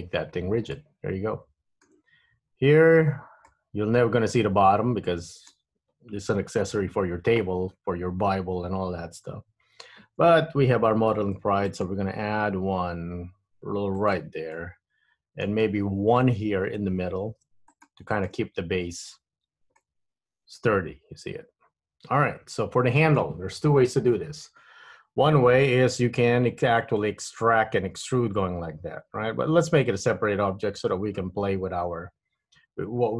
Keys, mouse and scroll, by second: 0.3-0.9 scroll down 5, 0.9 middle click, 2.2-3.0 scroll up 5, 3.0 Tab, 3.6 middle click, 11.3 ctrl+r, 14.7 middle click, 17.4 ctrl+r, 19.5 Tab, 19.9 middle click, 26.5 Tab, 27.1 middle click, 31.0 KP_1, 32.1 Tab.